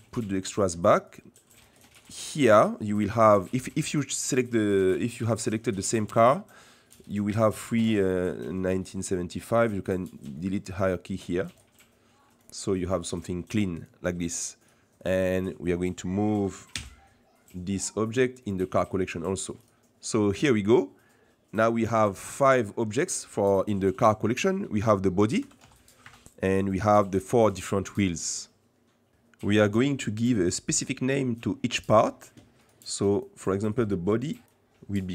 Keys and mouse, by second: 1.0 right click, 1.6 right click, 4.7 right click, 7.0 right click, 9.3-11.6 drag, 12.3 click, 13.8 click, 16.7 m, 19.5 click, 21.0 middle click, 21.8-22.4 middle drag, 25.4 g, 34.4-35.1 drag.